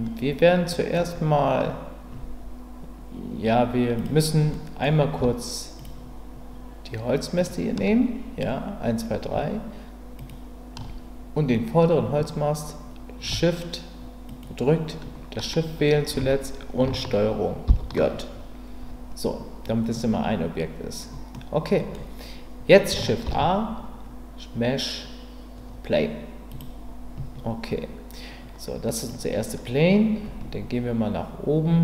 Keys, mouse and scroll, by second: 4.5 middle click, 5.8 shift+click, 14.3 shift+click, 17.7 ctrl+j, 21.3-21.9 middle drag, 23.2 shift+a, 29.1-31.8 drag.